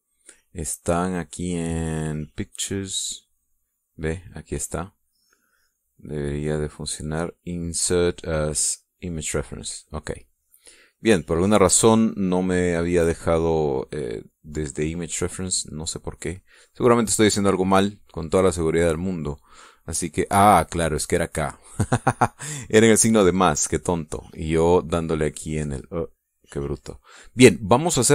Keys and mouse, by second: 0.0 click, 3.0 click, 4.9 click, 5.8 click, 9.4 click, 11.0 click, 11.8 click, 12.5-16.6 drag, 21.5 click, 24.6 click.